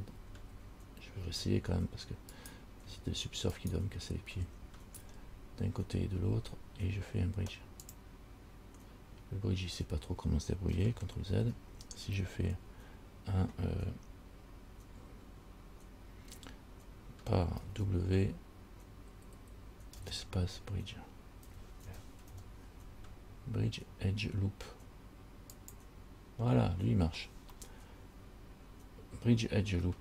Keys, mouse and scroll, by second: 0.4 ctrl+z, 0.7 ctrl+z, 2.6 alt+right click, 3.8 alt+shift+right click, 8.0 click, 11.7 ctrl+z, 17.8 w, 20.1 space, 27.8 middle click.